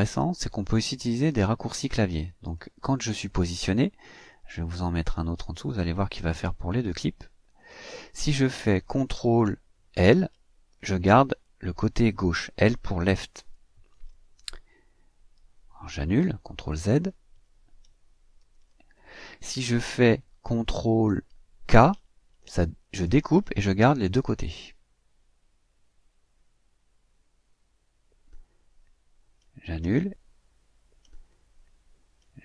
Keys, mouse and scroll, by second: 2.4 click, 4.2-6.1 drag, 7.6 click, 13.2 ctrl+l, 16.6 ctrl+z, 18.3 ctrl+z, 22.8 ctrl+k, 29.7 ctrl+z, 31.2 ctrl+z.